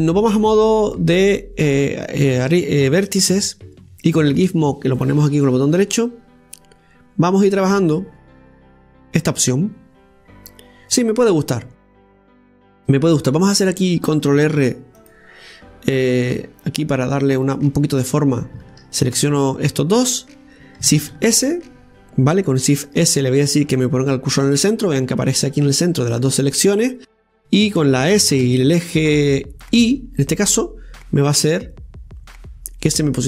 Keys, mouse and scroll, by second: 1.7 click, 2.7 right click, 3.8 shift+right click, 5.0 click, 6.7-9.7 drag, 11.8 scroll up 2, 12.4-15.2 scroll up 2, 19.0 right click, 19.8 shift+right click, 21.9 shift+s, 29.0 s.